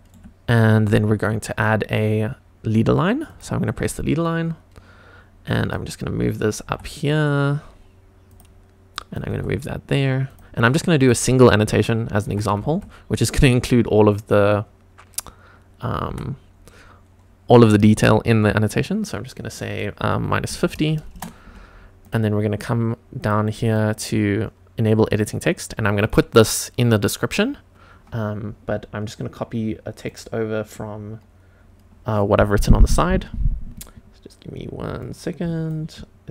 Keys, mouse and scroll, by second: 0.5 click, 3.3 click, 5.5 click, 6.7 g, 8.3 click, 9.0 click, 9.3 g, 10.3 click, 11.0 click, 12.3 e, 12.6 x, 16.1 y, 20.1 KP_Subtract, 20.5 KP_5, 20.6 KP_0, 21.1 Return, 21.5 Tab, 22.0 click, 23.2 click, 23.6 click, 25.1 click.